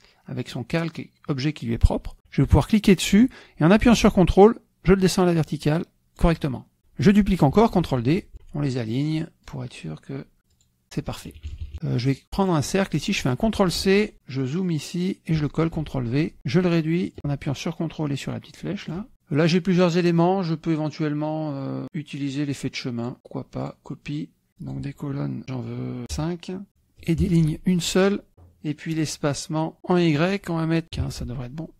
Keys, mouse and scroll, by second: 2.6-6.2 drag, 6.8 click, 7.6 ctrl+d, 8.2 ctrl+click, 9.3 click, 10.4 click, 11.2 KP_Subtract, 11.8 click, 12.4 click, 12.8 click, 13.6 ctrl+c, 14.3 click, 15.6 ctrl+v, 17.0-19.1 ctrl+drag, 22.8 click, 23.5 click, 24.5 click, 26.0 KP_5, 26.7 click, 28.3 click, 30.6 click, 31.0 click.